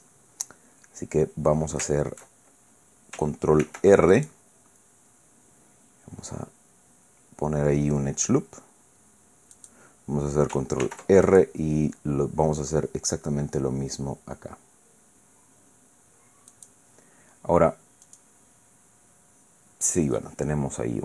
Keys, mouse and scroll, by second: 0.2-0.7 scroll up 1, 2.7-3.0 shift+scroll down 2, 3.6 ctrl+r, 4.1 ctrl+click, 9.6 click, 10.8 ctrl+r, 11.2 ctrl+click, 16.5 click, 18.0 click.